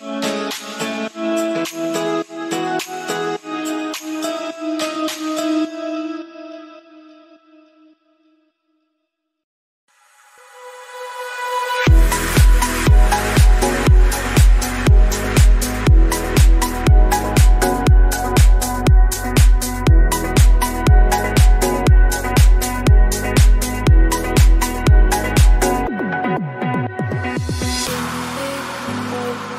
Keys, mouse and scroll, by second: 0.0 KP_1, 0.3-0.7 scroll up 2, 0.7-2.7 drag, 2.7 r, 3.5 click, 3.9-5.3 middle drag, 5.7-7.0 scroll down 4, 7.0-8.4 middle drag, 9.0 KP_7, 9.3-9.9 scroll up 2, 9.9 scroll down 1, 10.1 middle click, 10.7 shift+a, 14.1 click, 14.6 scroll down 2, 14.7 middle click, 15.5 Delete, 16.7 shift+right click, 17.1 shift+a, 18.7-20.6 drag, 20.7 scroll up 2, 21.0 middle click, 21.2 scroll down 2, 21.4 click, 21.7-23.2 right drag, 23.2 click, 24.1 KP_1, 24.5 scroll up 1, 24.8 shift+middle click, 25.0-25.4 scroll up 3, 25.4 scroll down 1, 25.5 s, 27.6 s, 28.4 scroll up 1, 28.6 shift+middle click, 29.3 alt+z.